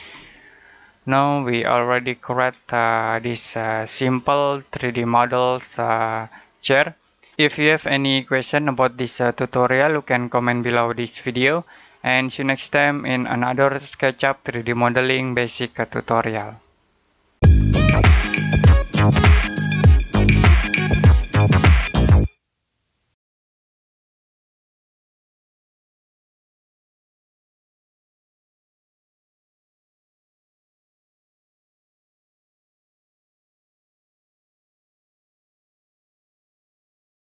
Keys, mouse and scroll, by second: 0.0 middle click, 2.1-3.0 scroll down 1, 3.0-3.7 scroll up 1, 5.9 scroll up 1.